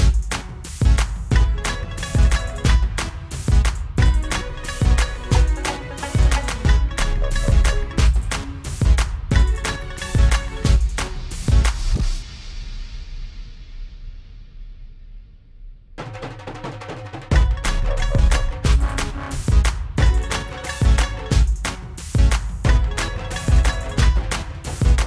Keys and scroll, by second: 3.7 F9, 13.0 u, 13.9 u, 15.3 ctrl+=, 19.4 Delete, 22.1 Delete.